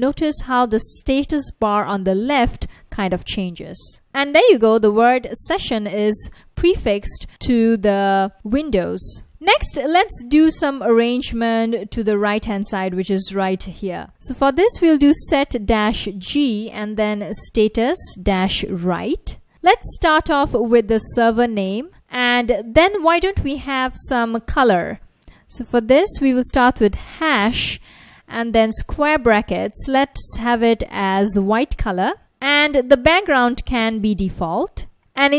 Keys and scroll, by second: 0.9 F1, 1.8 F1, 2.4 F1, 5.2 F1, 8.7 F1, 10.0 super+Tab, 14.0-20.0 typing, 21.9 shift+3, 22.5 space, 26.0 typing, 27.1 typing, 28.3 ], 28.7 Left, 29.9-30.9 typing, 32.2-33.8 typing, 35.2 Right.